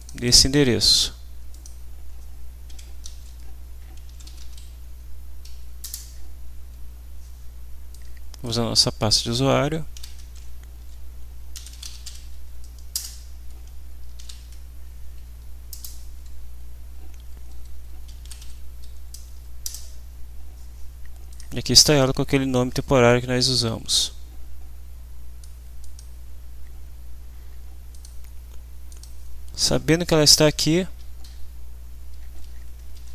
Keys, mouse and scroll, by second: 0.0 click, 1.5 click, 3.8-4.9 typing, 4.9 Down, 5.9 Return, 7.9 click, 9.1 click, 9.9 ctrl+h, 11.3-12.6 typing, 14.1 ctrl+h, 15.2 Down, 15.7 Return, 17.1 Down, 18.0-18.9 typing, 19.6 Return, 21.3 click, 23.1 click, 25.8 click, 28.0 click, 28.9 click, 29.5 Up, 30.3 End, 31.2 shift+Home, 32.7-33.1 typing.